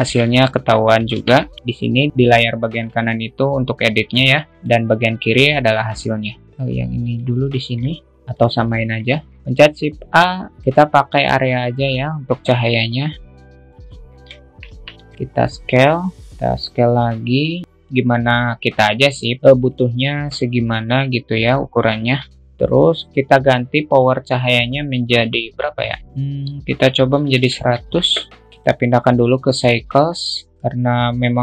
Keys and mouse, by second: 0.3 shift+middle click, 1.6 t, 2.6 alt+t, 2.9 middle click, 4.5 click, 7.6 click, 8.1 alt+middle click, 8.9 click, 9.6 shift+a, 12.9-14.8 drag, 14.3 alt+middle click, 19.7 alt+middle click, 20.9 alt+middle click, 22.1-24.5 alt+middle drag, 24.5-28.9 drag, 29.0-30.1 drag.